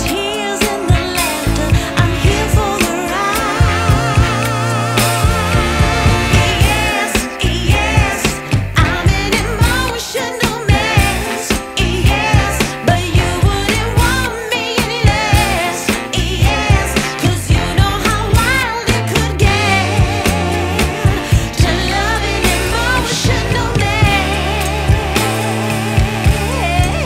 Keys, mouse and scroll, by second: 0.3 scroll down 3, 2.5 click, 3.1 scroll down 5, 4.4 scroll up 2, 5.6 g, 8.3 scroll up 1, 9.0 ctrl+s, 10.0 g, 12.4 g, 15.6 ctrl+s, 16.6 g, 18.5-20.0 scroll down 1, 20.0 g, 23.1 ctrl+s, 23.8 KP_1, 25.9-26.9 scroll up 2.